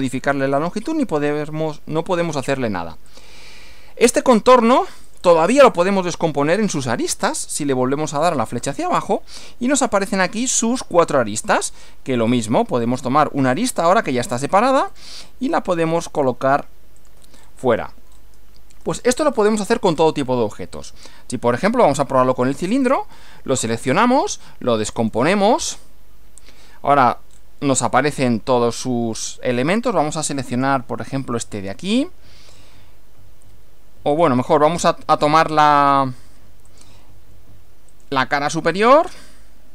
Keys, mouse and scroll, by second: 3.1 click, 4.3 click, 5.1 click, 5.7 click, 6.4 click, 8.2 click, 9.4 scroll down 1, 10.5 click, 10.9 click, 11.5 click, 12.3 click, 13.6 click, 14.9 click, 16.2 click, 17.0 click, 17.3 middle click, 17.4 scroll down 1, 18.1 scroll up 1, 18.9-19.8 shift+middle drag, 19.9-20.3 shift+scroll up 1, 22.9 click, 25.0 click, 26.3 scroll down 2, 27.3 scroll down 2, 30.5 click, 34.1 click, 34.7 click, 35.7 click, 36.7 click, 37.9 click.